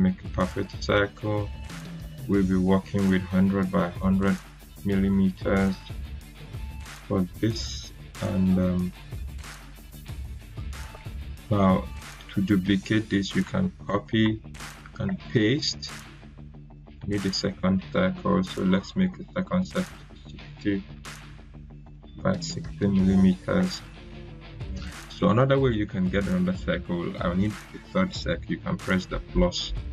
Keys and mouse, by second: 3.5-4.6 typing, 5.3 Tab, 5.7-7.0 typing, 7.2 Return, 9.0-10.3 drag, 13.8 ctrl+c, 15.0 ctrl+v, 16.7 click, 19.8 6, 21.7 Tab, 22.4-22.7 typing, 23.5 Return.